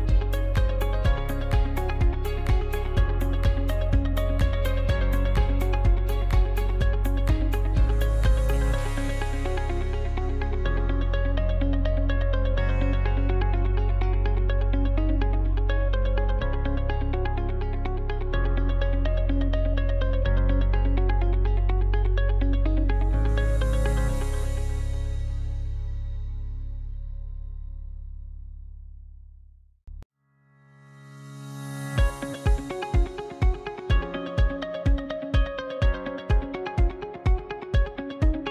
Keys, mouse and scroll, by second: 0.7-3.8 middle drag, 5.4 a, 7.2 w, 13.4 right click, 14.2 alt+right click, 15.4 g, 17.4 alt+right click, 18.4 g, 19.5-20.1 scroll down 2, 20.1-23.1 middle drag, 23.9 click, 24.8 alt+right click, 25.4-26.7 shift+middle drag, 26.7 alt+shift+right click, 27.4 alt+shift+right click, 27.9-30.1 middle drag, 30.1 KP_Decimal, 30.5-31.7 middle drag, 31.7 alt+shift+right click, 32.5 ctrl+z, 32.9 alt+shift+right click, 34.3 ctrl+e, 35.6 middle click, 36.1-36.5 scroll down 5, 36.5-37.6 shift+middle drag, 37.6 alt+shift+right click, 38.2 alt+shift+right click.